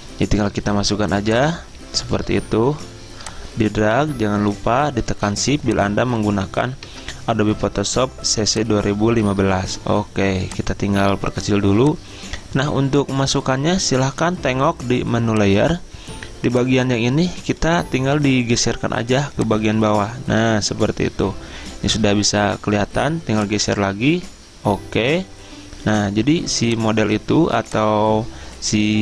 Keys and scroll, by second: 7.0 Return, 13.4 Return.